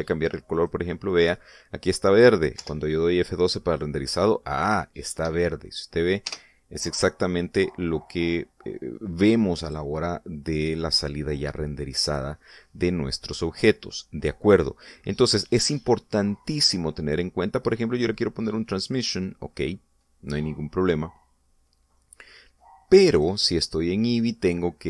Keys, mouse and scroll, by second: 0.4 click, 1.5 click, 3.6 F12, 6.2 Escape, 7.3 KP_0, 8.1-8.5 scroll up 2, 11.8-12.8 middle drag, 12.9 scroll up 1, 14.0 middle click, 14.8 scroll down 2, 16.0-16.6 scroll down 2, 18.6-20.2 drag, 24.2 click.